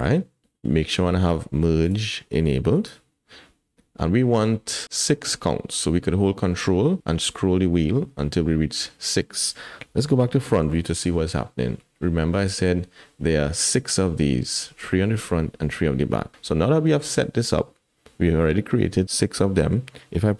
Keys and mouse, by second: 0.0 middle click, 1.8 click, 2.7 click, 10.5 KP_1, 16.5 middle click.